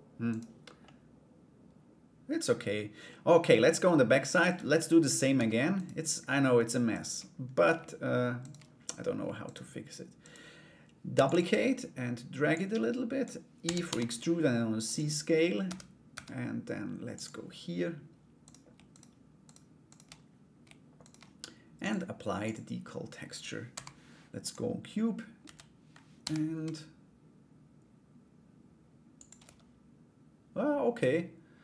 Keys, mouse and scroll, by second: 0.4-2.6 middle drag, 3.0 middle click, 4.0 right click, 4.4 middle click, 4.9 Tab, 5.3 right click, 6.5 shift+right click, 8.0 shift+right click, 9.0 shift+right click, 9.8 shift+right click, 10.7 shift+d, 12.2 click, 13.2 e, 15.2 Tab, 16.7 click, 18.0 right click, 18.5 shift+right click, 19.0 shift+right click, 19.4 shift+right click, 20.6 shift+right click, 21.4 click, 22.0 click, 25.0 a, 25.8 g, 29.0 Tab.